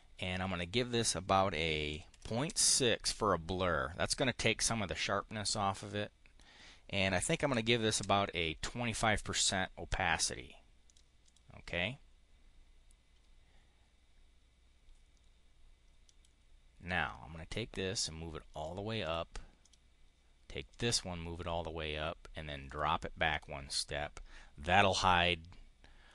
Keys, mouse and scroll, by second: 0.5 click, 1.8 Return, 2.4 Return, 5.8 click, 6.9-7.8 typing, 7.8 Return, 10.8 click, 11.0 click, 16.0 click, 18.4 click, 18.9 click, 19.4 click, 20.6 click, 22.5 click, 23.2 click.